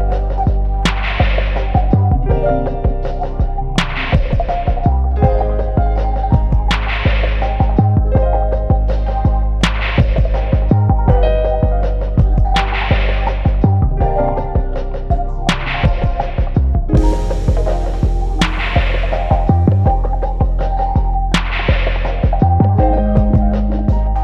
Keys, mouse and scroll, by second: 0.0 click, 0.5 `, 4.3 3, 4.5 `, 5.7 click, 6.6 x, 6.7 `, 8.2 click, 8.6 x, 9.3 click, 10.0 x, 10.5 click, 10.8 shift+click, 11.0 f, 11.3 `, 12.6 alt+a, 13.4 1, 13.6 click, 13.8 shift+click, 15.4 alt+a, 17.7-18.2 scroll down 1, 18.2 `, 19.8 click, 20.2 scroll up 1, 20.4 `, 20.8 2, 21.2 click, 21.9 e, 22.5 click, 24.0 shift+click.